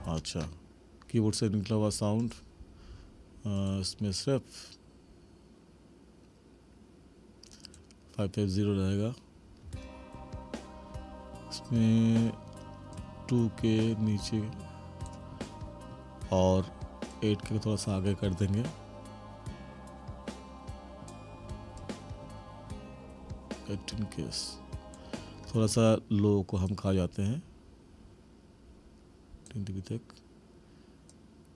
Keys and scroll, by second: 0.0 space, 9.6 space, 25.7 space.